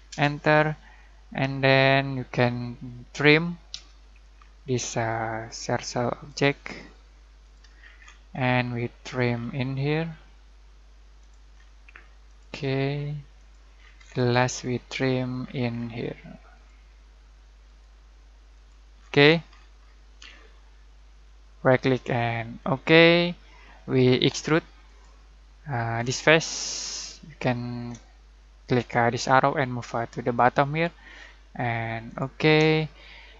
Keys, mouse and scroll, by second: 0.1 Return, 1.7 scroll down 1, 3.7 t, 4.3 scroll down 1, 5.4 click, 7.7 scroll down 1, 7.9 scroll up 1, 8.6-9.3 middle click, 9.3 scroll down 1, 11.2 click, 11.5 scroll down 1, 12.2 click, 13.7 scroll down 1, 13.9 scroll up 1, 14.6 middle click, 15.4-16.5 scroll down 1, 16.5 click, 18.9 scroll down 1, 19.1 scroll up 1, 20.5-21.5 middle click, 21.6 right click, 22.5 click, 23.1-23.7 middle drag, 24.8 click, 25.0 click, 26.8-27.7 shift+middle drag, 29.3-30.9 drag, 32.7-33.3 shift+middle drag.